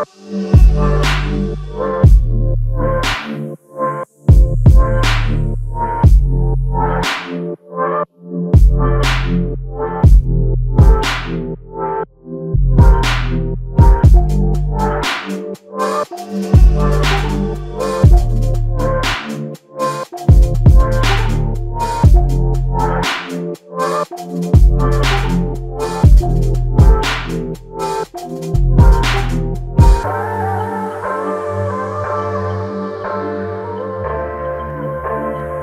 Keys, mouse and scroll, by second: 0.0 Return, 2.3 typing, 7.3 typing, 8.6 ctrl+click, 14.4 ctrl+click, 18.1 alt+click, 21.8 ctrl+alt+click, 23.4 f, 29.8 ctrl+click, 32.9 ctrl+click, 35.3 ctrl+click.